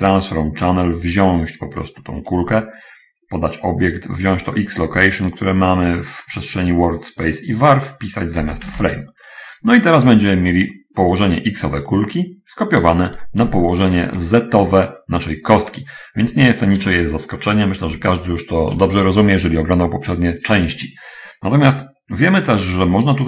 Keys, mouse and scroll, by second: 1.7 click, 2.6 click, 6.7-7.3 scroll up 1, 8.2 click, 8.8 v, 9.1 a, 11.1 right click, 12.3-13.6 drag, 14.0 shift+click, 15.4-17.1 drag, 16.8 Escape, 17.8 middle click, 18.5 shift+click, 23.0 click.